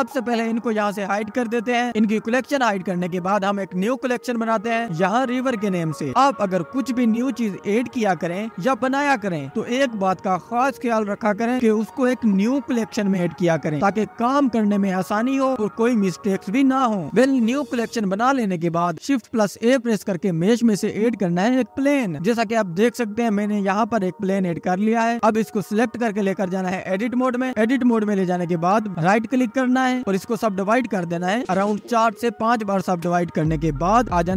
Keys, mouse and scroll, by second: 0.8 click, 2.9-6.8 drag, 6.8 BackSpace, 9.5-16.4 drag, 16.4 shift+a, 18.8 ctrl+s, 20.1-21.6 drag, 21.6-23.1 scroll up 1, 23.1-24.6 scroll up 1, 26.4 ctrl+s, 27.6 Tab, 28.9-34.3 right drag.